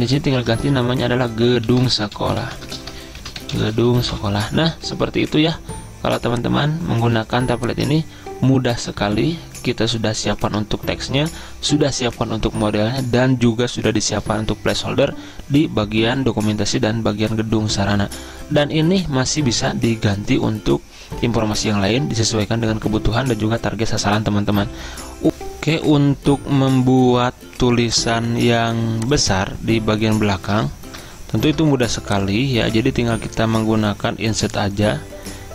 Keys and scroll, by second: 0.8 ctrl+a, 1.9-4.6 typing.